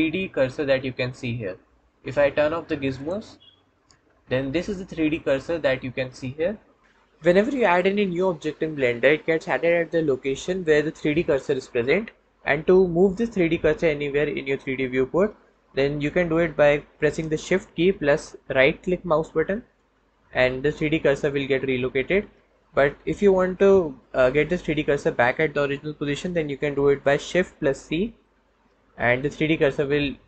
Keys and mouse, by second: 2.8 click, 28.2 shift+c, 28.5 shift+c.